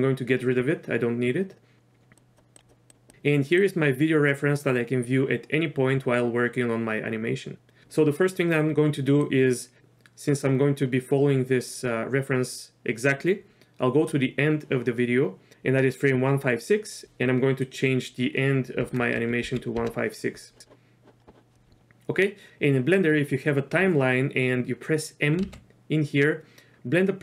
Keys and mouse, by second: 2.2 click, 2.6 click, 2.9 click, 3.7-7.8 drag, 9.3-14.2 drag, 17.0-20.4 drag, 17.0 BackSpace, 20.6 click, 25.5 m.